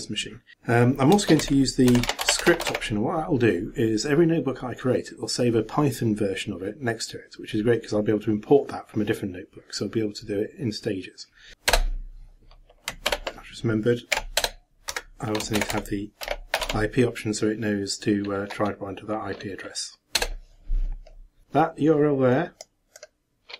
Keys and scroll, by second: 13.1 ctrl+c.